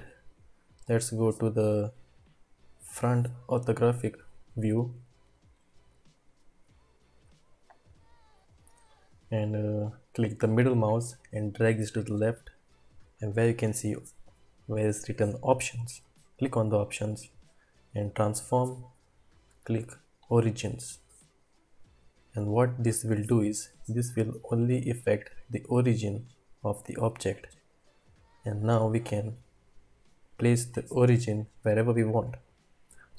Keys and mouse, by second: 2.8 click, 5.3-5.8 shift+middle drag, 6.3-6.8 shift+middle drag, 25.9-27.1 drag.